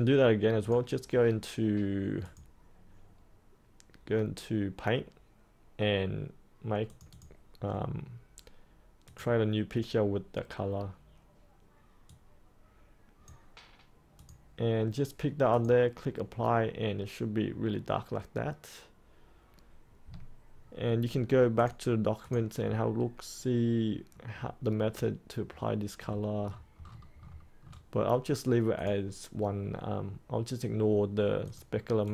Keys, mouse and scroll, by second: 22.5-23.8 scroll down 1, 23.8-26.4 scroll up 1, 26.4-28.1 scroll down 1, 28.7-32.1 drag.